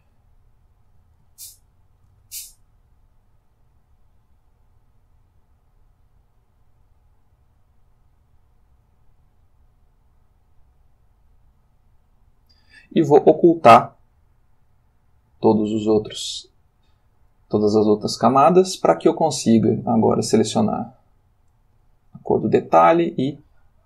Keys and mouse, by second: 1.2-2.3 ctrl+shift+middle drag, 3.5-12.2 drag, 14.3-16.1 drag, 20.1 click, 21.6 click, 23.0 click.